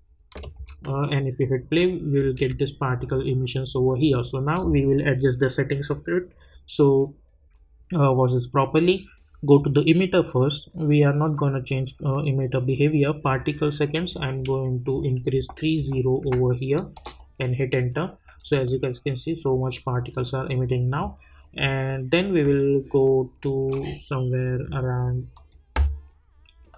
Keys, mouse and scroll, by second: 0.5 space, 9.4 click, 13.2 click, 16.9 Return, 25.3 click.